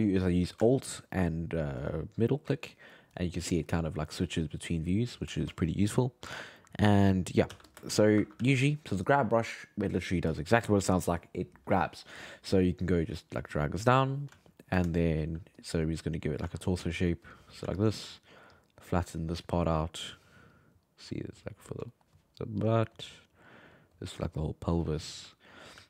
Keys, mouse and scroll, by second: 1.2 alt+middle click, 1.8 alt+middle click, 3.1 alt+middle click, 4.1 alt+middle click, 4.4 alt+middle click, 5.7-7.5 shift+middle drag, 7.5 f, 7.9 shift+middle click, 8.4 f, 12.9-14.4 drag, 14.4 alt+middle click, 15.0 shift+middle click, 15.6 click, 16.4 f, 16.9 click, 17.6 f, 18.2 shift+middle click, 18.5-21.9 drag, 21.9 shift+middle click, 22.6-25.0 drag, 25.0 alt+middle click, 25.7 f.